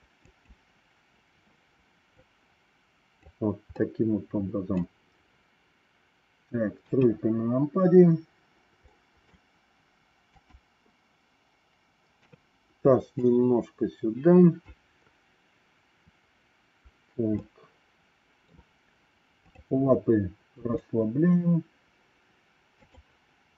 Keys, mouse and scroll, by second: 0.2 click, 2.1 click, 3.7 middle click, 6.7 KP_3, 8.8 middle click, 10.2 click, 12.1 KP_3, 13.1-14.6 drag, 17.3-18.5 middle drag, 20.5 g.